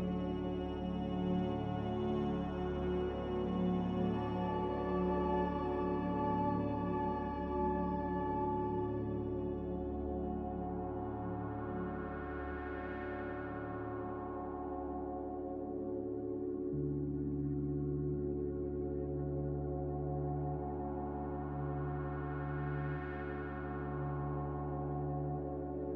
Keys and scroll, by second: 2.1 Delete.